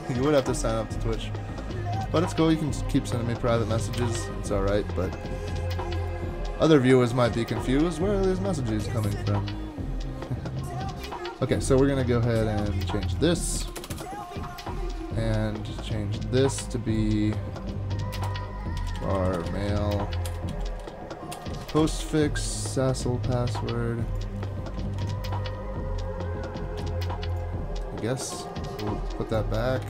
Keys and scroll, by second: 4.0 super+/, 13.6 BackSpace, 13.8 BackSpace, 13.9 BackSpace, 18.1-22.5 typing, 24.8 super+Left, 25.0 super+Left, 28.3 super+/, 29.8 super+Left.